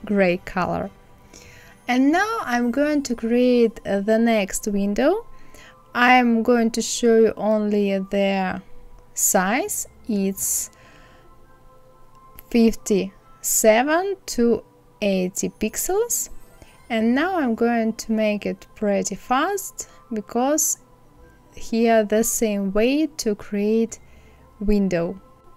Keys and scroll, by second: 12.4 KP_8, 12.7 KP_0, 18.8 ctrl+c, 19.8 ctrl+z, 21.9 Left, 24.0 ctrl+c, 24.1 ctrl+f.